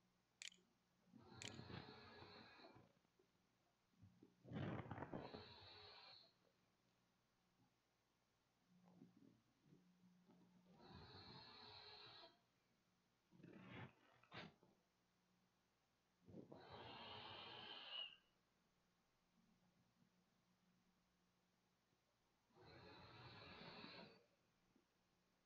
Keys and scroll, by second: 1.0 ctrl+s, 1.6 a, 11.3-12.7 typing, 15.2 =, 23.8 -.